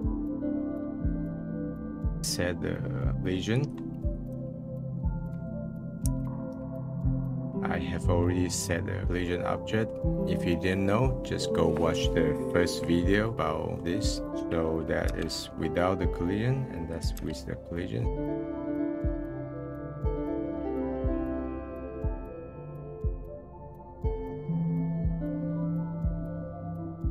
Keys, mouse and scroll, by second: 0.4 click, 1.2 click, 1.7 click, 2.0 middle click, 2.7-3.2 scroll down 6, 2.9 middle click, 3.2 middle click, 3.6 click, 3.7 shift+a, 5.6 l, 7.9 middle click, 8.9 scroll up 1, 9.0-10.0 middle drag, 13.5 middle click, 14.3 click, 15.2 m, 15.6-16.9 middle drag, 16.9 click, 17.2 m, 17.7 middle click, 18.0 drag, 18.3 middle click, 18.5-19.5 drag, 19.5 middle click, 19.6 click, 19.7 middle click, 20.0 scroll down 13, 20.1 middle click, 20.2 click, 21.0 middle click, 21.2 click, 21.3 middle click, 21.4 click, 21.5 middle click, 21.7 click, 21.8 middle click, 22.0 click, 22.2 middle click, 22.4 click, 22.5 middle click, 22.7 click, 23.2 middle click, 23.5 click, 23.8 middle click, 24.2-24.7 scroll down 2, 24.5 click, 24.7 middle click, 25.6 scroll up 5, 25.6-25.9 scroll down 4, 25.8 middle click, 26.0 click, 26.1 middle click, 26.2 click, 26.3 middle click, 26.4 click, 26.5 middle click, 26.5-27.1 drag.